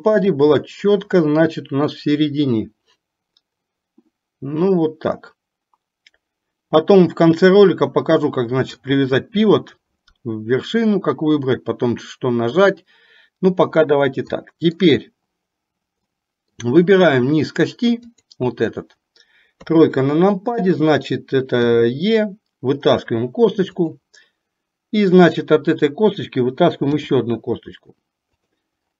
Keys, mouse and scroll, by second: 0.8 shift+middle click, 2.2-8.9 drag, 14.5 middle click, 16.2 middle click, 18.2 click, 19.8 KP_3, 21.7 e.